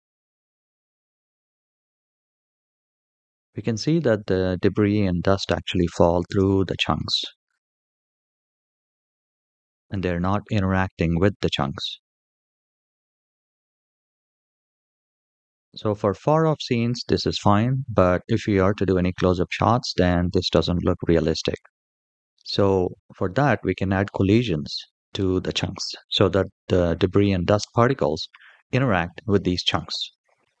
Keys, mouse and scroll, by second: 2.1-2.6 scroll up 3, 5.7 space, 6.1 space, 6.8 middle click, 6.8-7.7 scroll down 3, 7.0-9.0 middle drag, 7.7-9.0 scroll down 1, 15.4 space, 15.6 shift+middle click, 15.6 scroll down 3, 16.2 shift+middle click, 17.4 shift+middle click, 18.8-20.4 scroll up 3, 30.4 click.